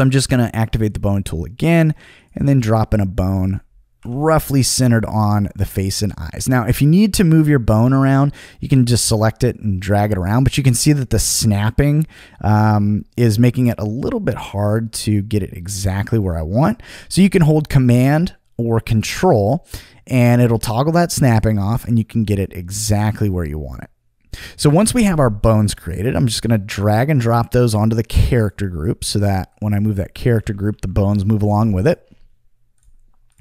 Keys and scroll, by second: 4.0 t, 30.7 super+z.